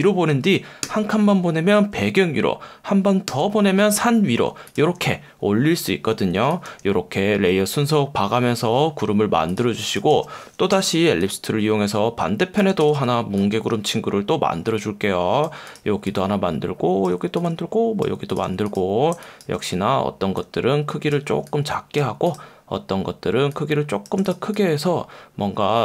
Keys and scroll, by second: 0.8 super+], 3.3 super+], 6.4 space, 9.7 space, 10.7 l, 12.8 v, 19.1 space.